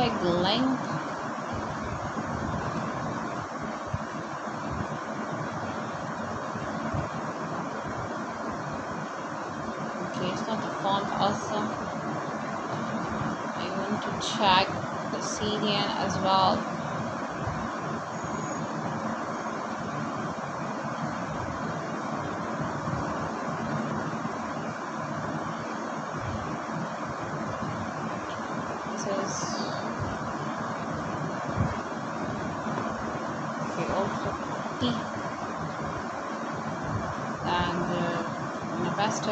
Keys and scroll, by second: 18.9 ctrl+c, 26.9 ctrl+v, 35.3 /, 35.7 shift+., 39.0-39.3 typing.